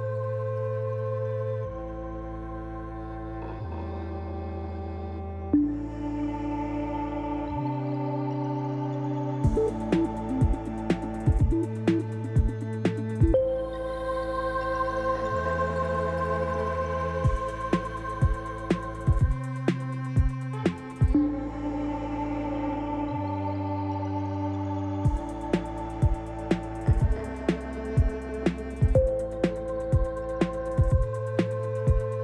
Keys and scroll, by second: 0.2 2, 0.8 Return, 7.5 alt+a, 21.7 ctrl+alt+0, 23.0 n.